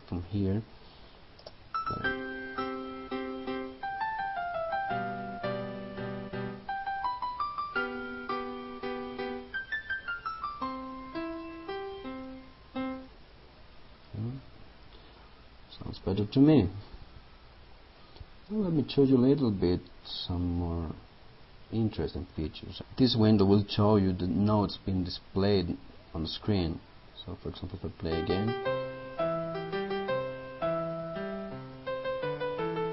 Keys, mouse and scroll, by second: 0.3 click, 1.6 space, 15.9 click.